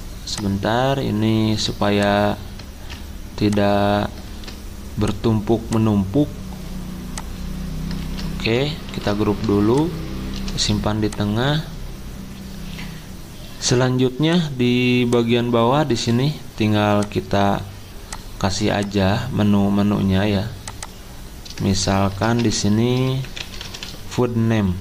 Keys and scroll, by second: 2.7 ctrl+z, 4.3 ctrl+z, 8.0 ctrl+z, 8.9 ctrl+g, 10.3 c, 22.1 ctrl+Caps_Lock, 23.0-24.3 typing.